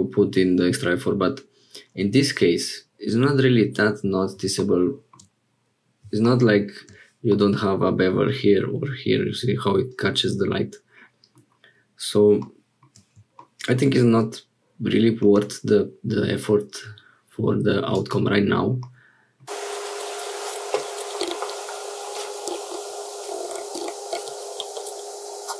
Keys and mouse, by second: 7.3 middle click, 10.1-11.5 middle drag, 15.2-16.6 drag, 18.0 click, 18.8 middle click, 19.9 click, 21.2 g, 24.5 middle click.